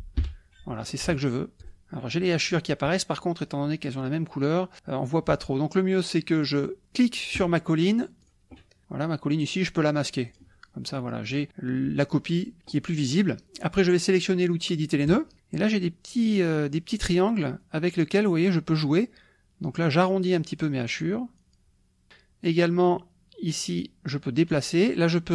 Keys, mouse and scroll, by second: 0.3 h, 6.4 click, 8.3 click, 10.3 click, 11.3 click, 15.1 click, 16.2-17.2 drag, 17.6-22.3 drag, 22.9-24.7 drag.